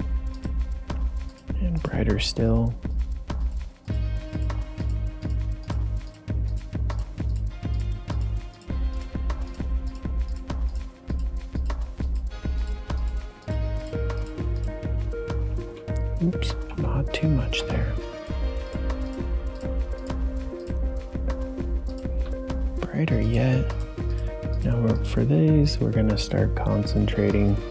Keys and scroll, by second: 16.6 ctrl+z, 17.5 ctrl+z.